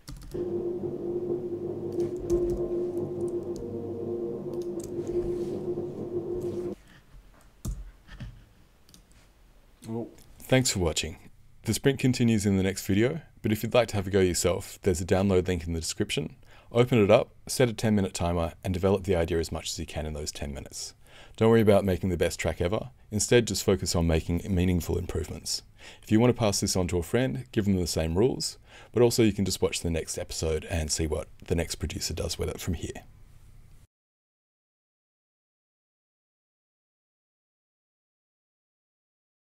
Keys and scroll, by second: 7.6 Return.